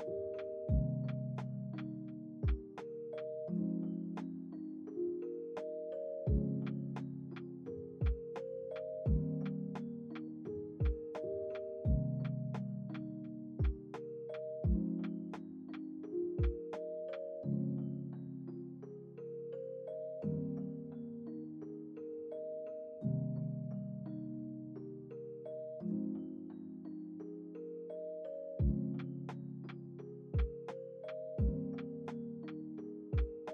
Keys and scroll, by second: 0.9 ctrl+s, 6.2 space, 8.1 space, 9.4 =, 10.8 z, 14.1 ctrl+c, 14.4 ctrl+v, 23.9 ctrl+s, 24.3 space, 26.2 space.